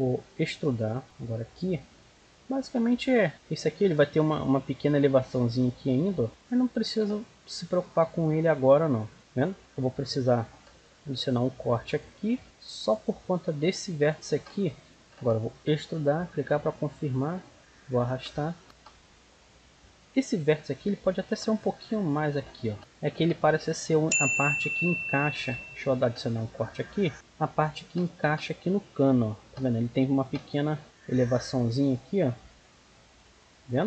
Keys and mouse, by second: 0.3 click, 1.1-2.8 right drag, 1.7 click, 6.4-8.5 right drag, 7.5 click, 8.5 click, 9.2 middle click, 9.7 ctrl+r, 12.4 right click, 12.9-14.6 drag, 14.7 click, 14.8 middle click, 14.9-16.0 right drag, 15.5 e, 16.0 middle click, 16.5-17.6 drag, 17.6 middle click, 18.4 z, 19.4 middle click, 19.4 z, 20.3 right click, 21.1-22.5 drag, 25.3 ctrl+r, 27.1-28.6 right drag, 27.8 g, 30.2 g, 31.2-33.4 right drag, 31.6 g, 32.4 g, 33.4-33.8 drag.